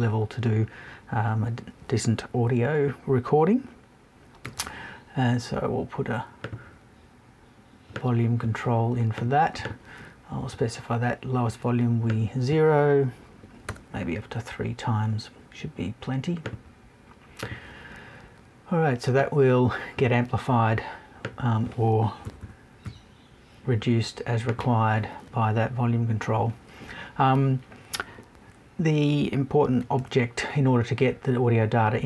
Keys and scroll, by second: 22.2 Right, 22.8 Left.